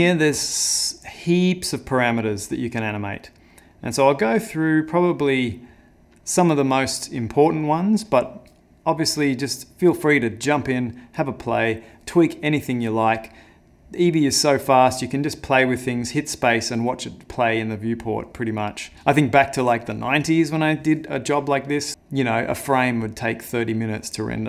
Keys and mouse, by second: 0.7 middle click, 1.7 middle click, 2.5 middle click, 3.0 middle click, 3.4 middle click, 3.7 middle click, 4.1 middle click, 4.5 middle click, 5.2 middle click, 5.7 middle click.